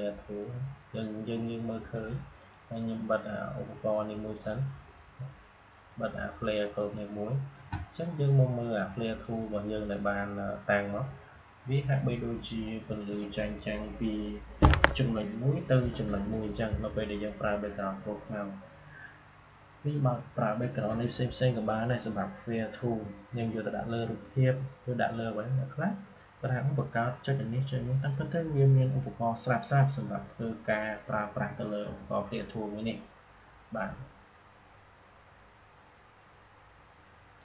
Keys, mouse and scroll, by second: 0.3-11.8 drag, 12.3 click, 37.3 click.